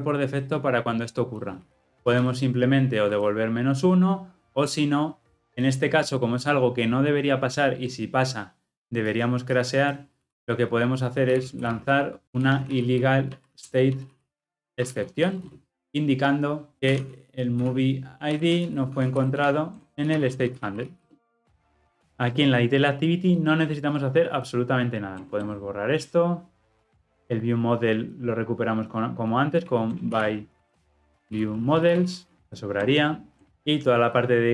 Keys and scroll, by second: 33.5 alt+Return.